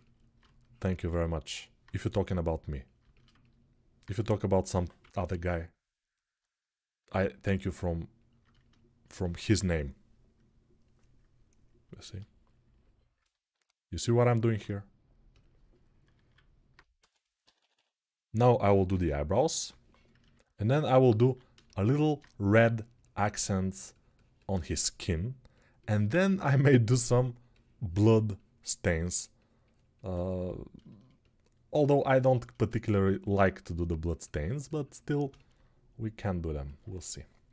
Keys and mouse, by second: 4.4 g, 4.8 ], 5.0 ], 16.0 alt+q, 16.7 s, 17.2 [, 17.3 [, 18.6-19.4 [, 21.0 alt+q, 31.9 alt+shift+right click, 32.7 ctrl+alt+click, 32.8 ctrl+right click, 32.9-37.5 ctrl+alt+drag.